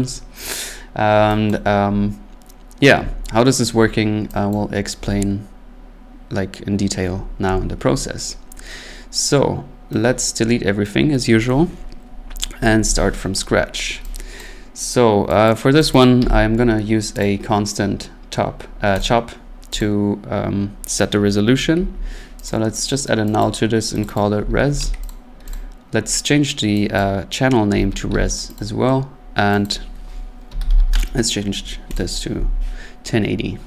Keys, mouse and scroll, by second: 0.9-1.3 scroll, 1.5 click, 3.1 middle click, 3.2 middle click, 4.5 click, 10.9 right click, 12.6 Delete, 13.5-14.1 scroll, 14.4 click, 15.5 click, 15.9 click, 16.0 click, 16.2 c, 17.2 click, 18.0 scroll, 19.0 click, 19.8 click, 21.7 alt+n, 22.5 click, 22.9 click, 23.4 click, 24.0 click, 24.2 click, 24.2-25.3 typing, 25.1 click, 25.5 click, 27.0 click, 27.7-28.6 typing, 28.6 click, 29.6 click, 30.2-31.0 typing, 32.0 click.